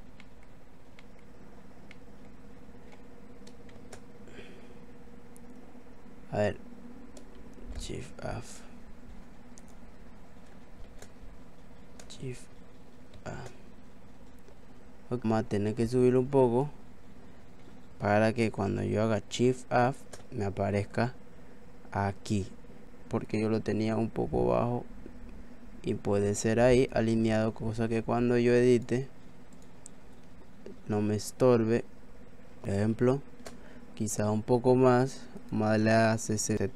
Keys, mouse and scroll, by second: 0.2 middle click, 1.0 middle click, 1.9 middle click, 3.8 shift+a, 7.5 shift+a, 9.6 click, 13.2 shift+a, 15.2 click, 19.5 shift+a, 23.3 click, 28.7 click, 32.6 click, 32.6 shift+a, 33.0 shift+a, 34.9 i, 35.4 click.